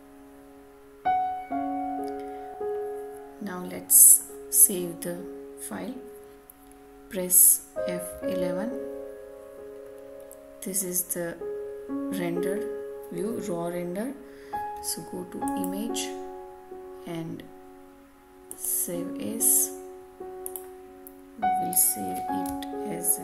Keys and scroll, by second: 8.0 F11, 22.4 BackSpace.